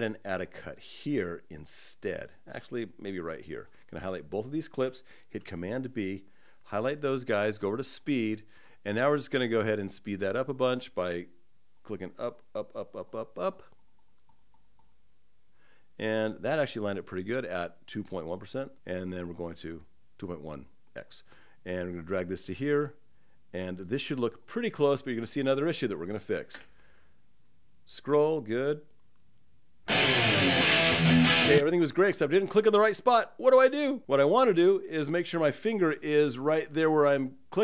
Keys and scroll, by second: 5.1 super+b.